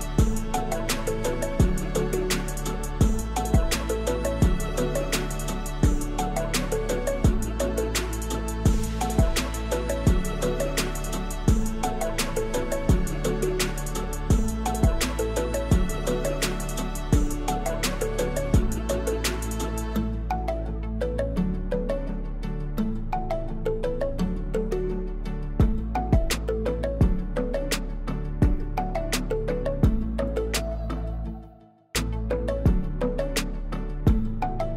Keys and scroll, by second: 1.5 e, 2.6 e, 4.3 shift+z, 4.9 a, 5.3 s, 5.4 x, 6.5 3, 12.4 ctrl+r, 13.3 Return, 13.6 s, 13.7 x, 16.4 ctrl+r, 18.6 ctrl+r, 19.8 Tab, 20.1 ctrl+2, 24.5-26.2 typing, 25.5 Tab, 28.0 g, 28.7 shift+z, 31.9 Tab.